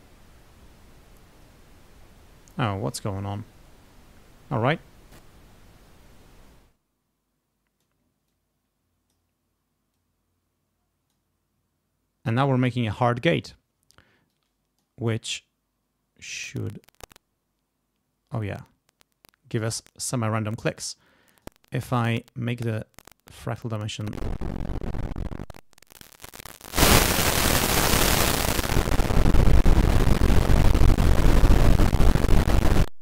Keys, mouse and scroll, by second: 0.9 click, 2.8 click, 3.5 click, 5.1 click, 6.1 right click, 6.5-8.0 drag, 8.3 click, 9.9-11.3 drag, 14.3 click, 16.2-19.9 drag, 21.2 click, 23.6-24.8 drag, 25.4 click, 26.7 click, 27.8-30.4 drag, 30.7 click, 31.3 click, 32.8-33.0 drag.